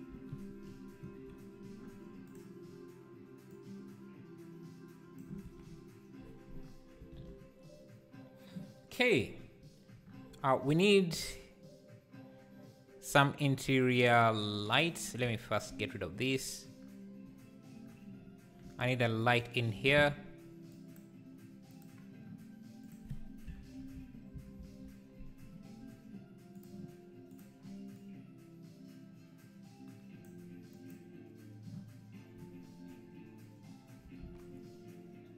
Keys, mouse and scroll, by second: 3.7-5.5 drag, 5.5 alt+a, 14.8 click, 15.2 x, 19.2-20.3 shift+right drag, 21.8 shift+a, 24.6-25.8 drag, 25.8 g, 27.9 Left.